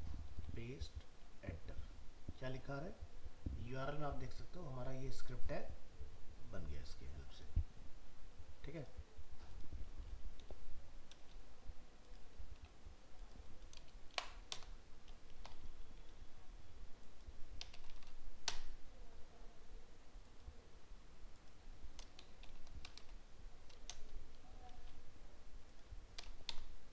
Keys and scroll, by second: 0.3 ctrl+v.